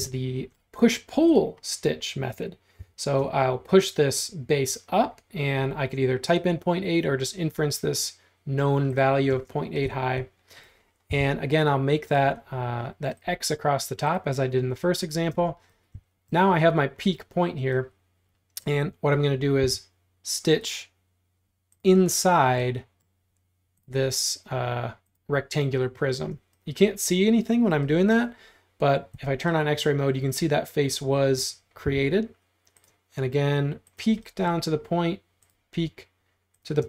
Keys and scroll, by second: 0.0-0.6 typing, 2.8 p, 9.4 space, 11.1 l, 15.3 space, 19.7 l, 26.2 space, 29.2 x, 31.9 l.